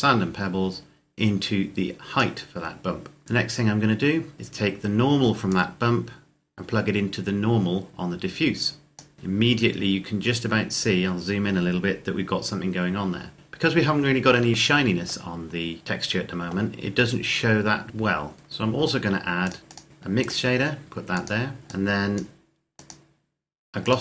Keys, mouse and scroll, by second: 5.4 click, 9.6-11.0 scroll up 1, 14.5 scroll up 1, 14.7 middle click, 17.5 scroll down 1, 18.3-19.5 scroll up 1, 19.5 click.